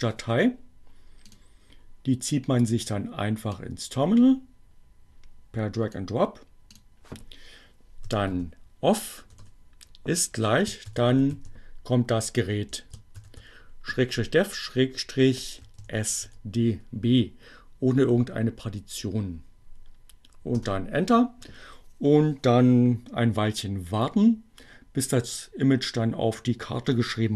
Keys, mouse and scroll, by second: 1.1 click, 3.0-7.0 drag, 7.5-8.3 typing, 9.4-12.8 typing, 15.2-16.1 typing, 20.6 Return.